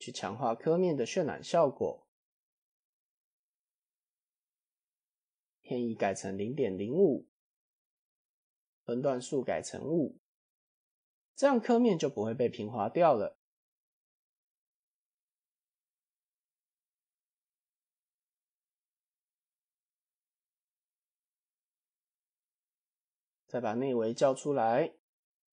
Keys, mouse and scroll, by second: 0.3-0.7 middle drag, 1.7 middle drag, 3.1 click, 5.5-7.6 drag, 6.5 KP_0, 8.8-10.2 drag, 10.5-10.8 middle drag, 11.3-12.1 right drag, 12.4-12.8 middle drag, 12.8-13.5 scroll up 2, 13.5 scroll up 2, 13.8 scroll down 2, 14.0 middle click, 15.5 click, 15.9 scroll down 3, 16.1-16.9 middle drag, 17.1 click, 17.3 Tab, 17.8 a, 19.0 shift+n, 19.5 Tab, 20.0-20.3 middle drag, 20.5 click, 22.4 click, 23.0-23.7 drag, 24.5 click.